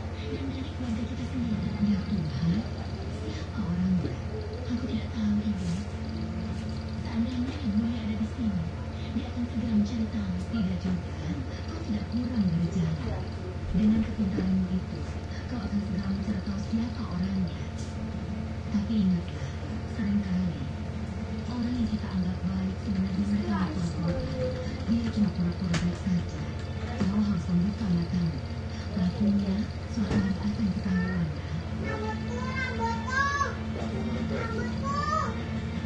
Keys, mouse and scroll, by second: 1.7-2.7 drag, 3.4 click, 5.1 click, 7.5 click, 9.8 click, 11.0-11.9 drag, 17.1 click, 18.4 click, 19.7 click, 21.0 click, 23.1-27.6 typing, 33.2 click, 34.6 click.